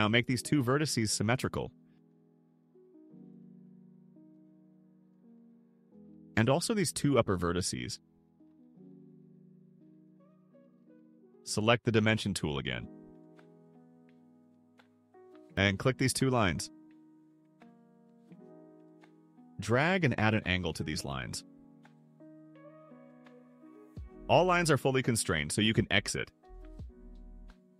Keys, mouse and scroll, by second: 1.1 click, 2.1 click, 3.3 click, 5.5 click, 6.7 click, 7.8 click, 8.9 click, 13.6 click, 15.0 click, 16.9 click, 18.6 click, 19.9-20.8 typing, 21.2 Return, 27.5 click.